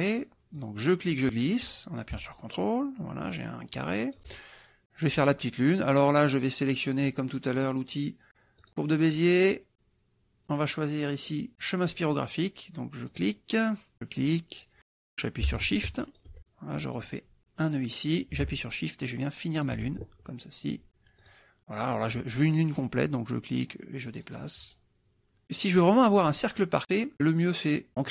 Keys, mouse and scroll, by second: 0.4 click, 1.2-4.4 drag, 8.6 click, 13.1 click, 14.0 click, 16.1 shift+click, 17.0 click, 19.7 shift+click, 21.2 click, 24.1-25.4 drag.